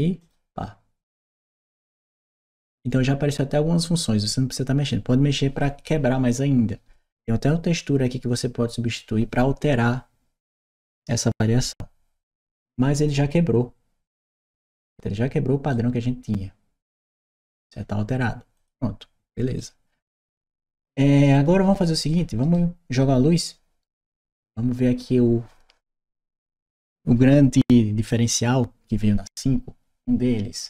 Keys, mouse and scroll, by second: 0.1 click, 12.2-14.2 drag, 18.4 click, 19.4 right click, 21.1 right click, 21.9 right click.